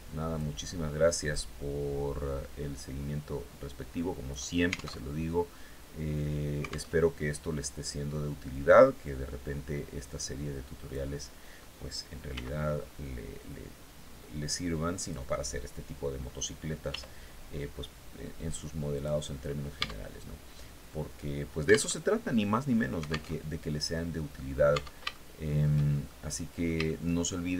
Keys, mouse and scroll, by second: 0.7-3.9 drag, 4.4 alt+Tab, 6.4 alt+Tab, 7.9-9.6 drag, 9.6 scroll down 2, 11.7 s, 14.4 click, 16.3 r, 17.4 scroll down 1, 18.4 click, 19.2 Tab, 19.9 scroll down 1, 21.3 alt+Tab, 22.8 alt+Tab, 23.3 click, 24.1 Tab, 24.5 shift+click, 25.5 shift+middle click, 26.3 shift+middle click, 27.3-27.5 shift+middle drag.